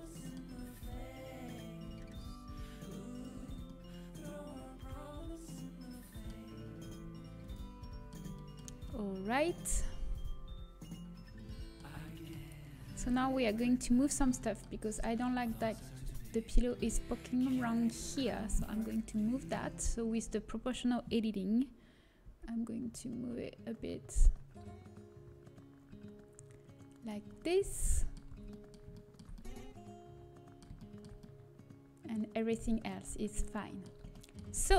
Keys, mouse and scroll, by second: 1.1 z, 1.9 s, 3.3 z, 3.7-6.3 middle drag, 6.9 s, 7.7-11.1 middle drag, 11.8 scroll up 1, 12.0 middle click, 13.4 KP_7, 15.9 Tab, 20.3-22.6 drag, 22.6 g, 27.2-28.8 middle drag, 28.8 a, 32.8 middle click, 34.0 middle click.